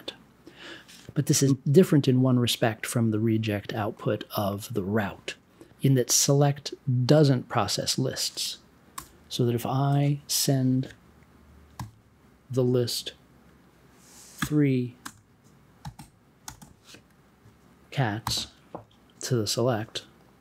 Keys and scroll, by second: 8.9 BackSpace, 11.7 m, 14.3 3, 15.0 space, 15.8 c, 18.2 super+j.